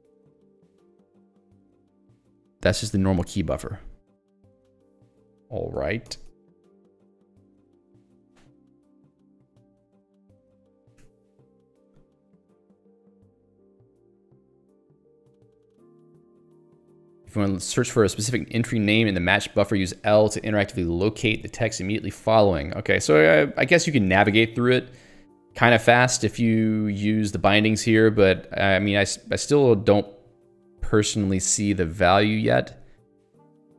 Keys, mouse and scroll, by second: 3.4 click, 4.3 click, 4.4 q, 7.3 ctrl+g, 10.9 ctrl+w, 11.0 c, 12.0-12.3 scroll down 1, 14.1-15.8 scroll down 1, 15.8 scroll up 1, 29.5-29.9 scroll down 1, 30.2-31.7 scroll down 2, 31.7-32.2 scroll up 2, 32.9 scroll up 1, 33.0 scroll down 1.